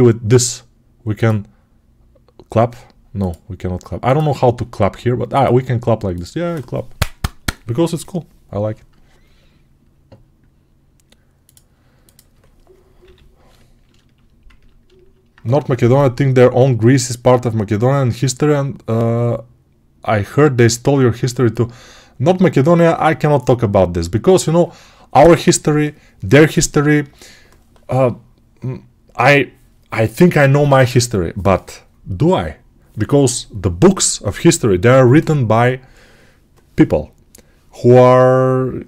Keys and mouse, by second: 12.9 g, 14.0-38.8 alt+drag.